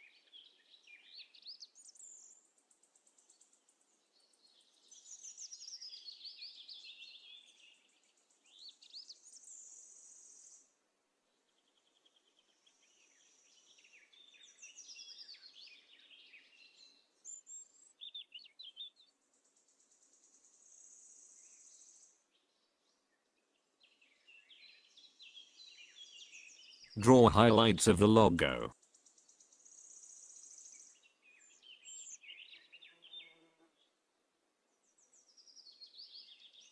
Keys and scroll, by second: 13.2 ctrl+KP_Add, 22.1 ctrl+KP_Subtract, 24.7 z.